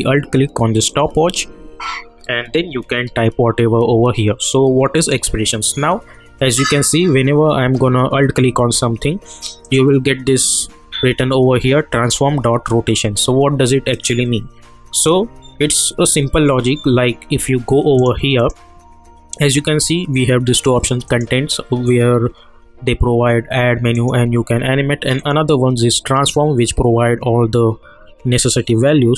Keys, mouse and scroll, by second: 4.9 click, 9.6 click, 13.9 click, 18.0 click, 21.0 click, 23.9 click.